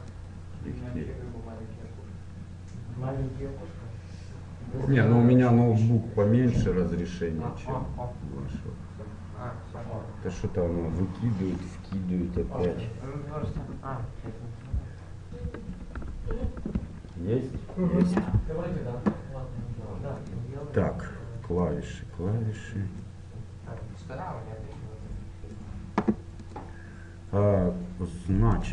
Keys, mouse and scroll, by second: 21.6-24.9 drag, 26.5-28.4 drag.